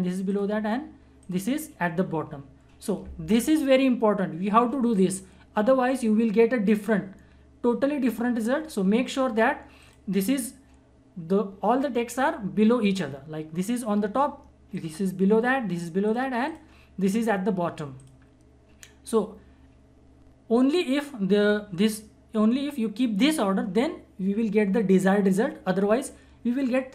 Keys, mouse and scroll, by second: 9.8 click, 14.7 click.